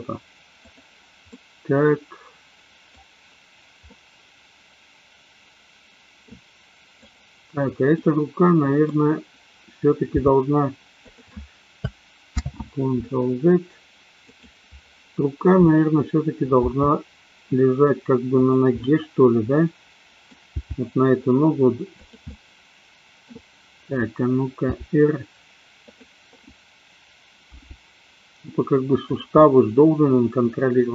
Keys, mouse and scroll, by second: 0.7 click, 1.3-3.0 middle drag, 3.9-6.3 middle drag, 6.9 click, 7.9-9.0 middle drag, 10.0 g, 11.0 click, 12.4 ctrl+z, 14.2 click, 16.7 g, 18.4 click, 18.8-20.3 middle drag, 20.4 g, 21.9 click, 22.3-23.3 middle drag, 24.7 r, 25.9 click, 27.5 g, 29.3-30.9 middle drag.